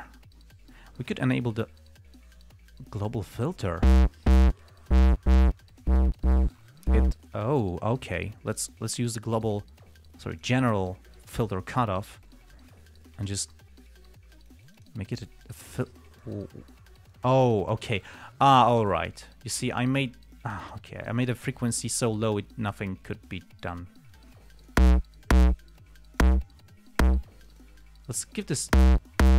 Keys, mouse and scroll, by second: 1.9 click, 3.6-4.2 drag, 4.9-5.4 drag, 5.9-6.4 drag, 8.8 click, 10.7 click, 11.6 click, 12.8-13.8 drag, 14.2-15.4 drag, 15.8-16.8 drag, 17.4-20.6 drag, 20.8-21.2 drag, 21.8 click, 23.0 click, 24.4-25.2 drag, 26.1-26.7 drag, 27.1 click, 27.8 click, 28.2-29.2 drag.